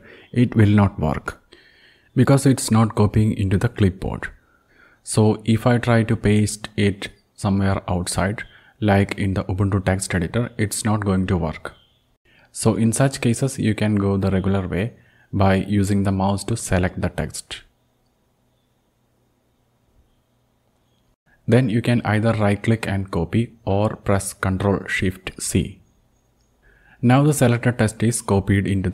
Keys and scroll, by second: 13.8 ctrl+v, 15.8 BackSpace, 26.8 ctrl+shift+c.